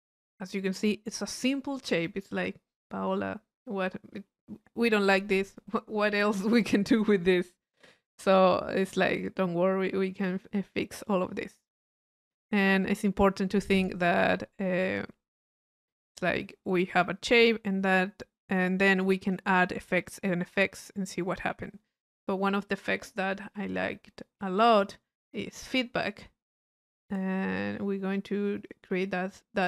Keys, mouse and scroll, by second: 5.1 click, 14.3 middle click, 14.9 click, 16.9 right click, 18.6-19.7 drag, 19.8 click, 21.4-23.6 middle drag.